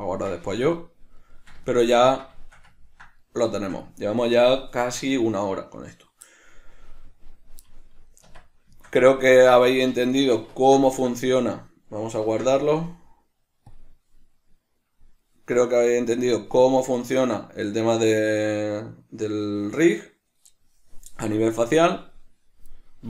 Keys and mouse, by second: 8.5 Tab, 9.1-23.0 shift+middle drag, 12.5 ctrl+s.